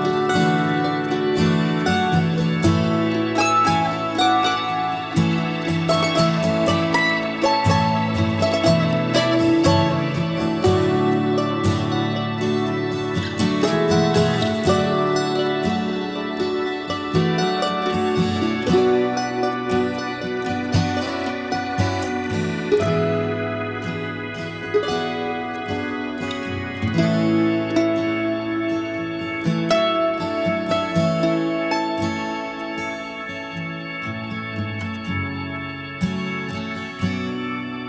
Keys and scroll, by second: 9.2-10.1 typing, 11.2 typing, 31.9 ctrl+a, 33.1 ctrl+h.